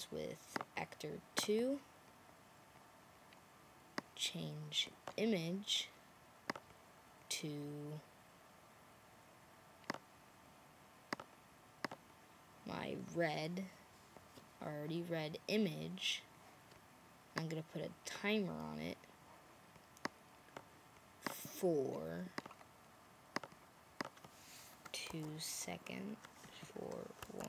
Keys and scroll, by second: 25.0 2, 26.9-27.4 typing.